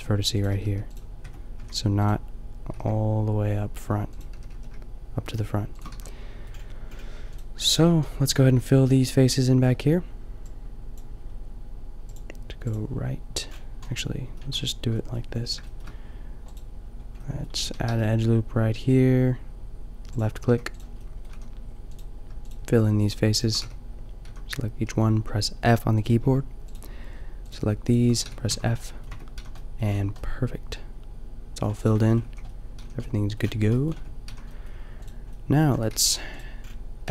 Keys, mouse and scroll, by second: 0.7 g, 1.3 Tab, 1.6 a, 2.6 g, 4.4 g, 5.9 a, 7.7 Tab, 8.3 a, 8.5 a, 8.9 a, 17.6 a, 17.9 ctrl+r, 20.8-23.7 drag, 21.3 a, 23.7 f, 24.2 a, 28.2 f, 28.5 a, 29.1 Tab, 29.4 a, 31.9-33.7 drag, 31.9 Tab, 32.2 a, 32.8 a, 33.9 Tab, 34.3 a, 35.9-37.1 drag, 35.9 g.